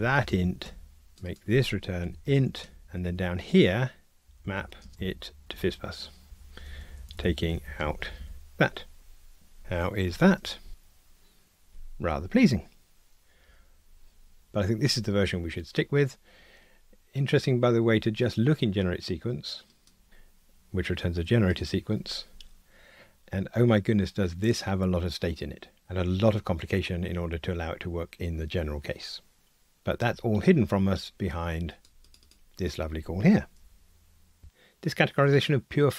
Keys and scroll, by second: 0.6 Escape, 6.3 Return, 10.1 ctrl+r, 19.9 super+b.